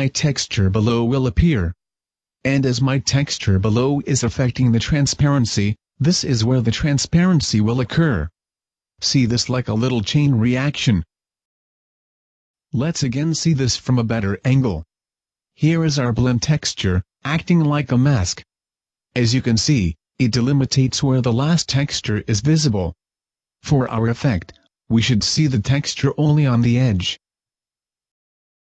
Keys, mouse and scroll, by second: 7.1 click.